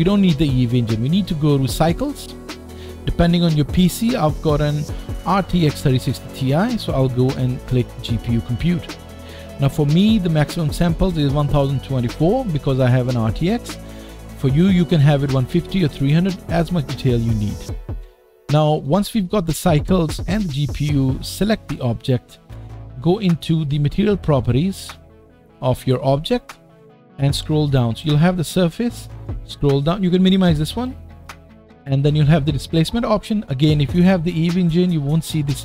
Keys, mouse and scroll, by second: 0.5-21.7 drag, 17.6 middle click, 21.7-24.7 middle drag, 24.7 click, 24.8-31.0 middle drag, 27.3 scroll down 2, 28.9-29.8 scroll down 3, 29.8-30.8 scroll up 1, 31.0-35.6 drag.